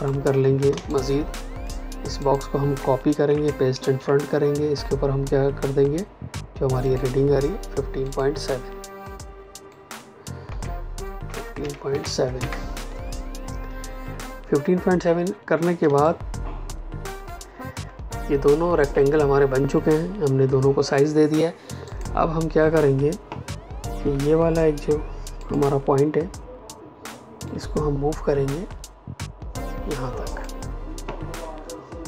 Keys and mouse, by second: 0.6 space, 0.8 click, 1.1 space, 2.1 click, 3.0 ctrl+c, 3.7 ctrl+f, 6.8 click, 10.4 KP_1, 11.2 KP_5, 11.8 KP_7, 12.3 KP_Enter, 15.8 space, 16.0 click, 16.3 space, 21.8 click, 23.9 a, 25.3 click.